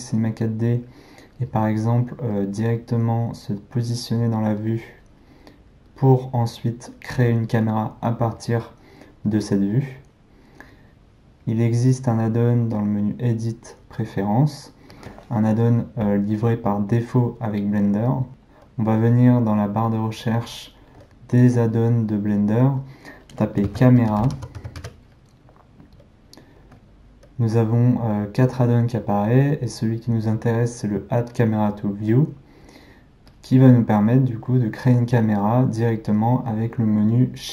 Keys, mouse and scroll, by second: 2.4-5.4 middle drag, 12.8-15.8 drag.